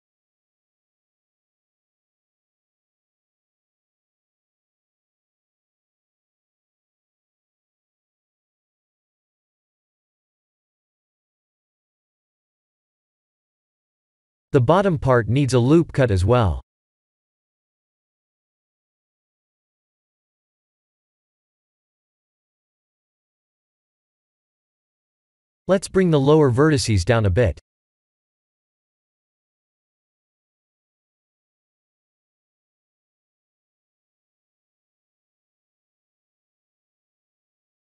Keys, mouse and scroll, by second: 2.3 click, 2.6 b, 5.6 click, 6.4 click, 7.4 click, 9.7 click, 11.8 click, 13.1 click, 15.6 Tab, 16.7 shift+middle click, 17.3 scroll up 4, 17.7 Tab, 20.4 ctrl+r, 23.6 click, 24.0 shift+z, 24.4 click, 25.0 1, 25.5 click, 26.2 click, 26.7 b, 27.7 g, 31.4 shift+z, 32.2 click, 33.0 Tab, 33.8 shift+middle click, 34.7 scroll down 5, 35.2 shift+middle click.